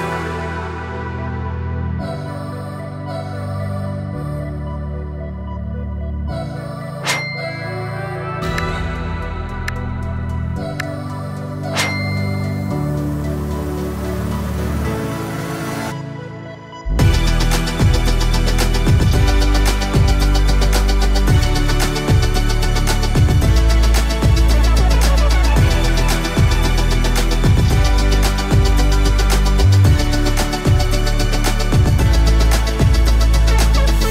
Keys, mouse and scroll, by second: 7.6-33.1 drag.